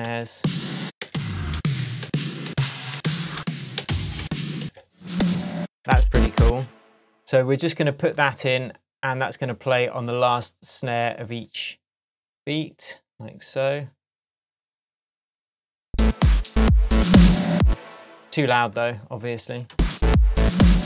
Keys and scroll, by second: 5.8 space, 17.6 space, 19.7 space.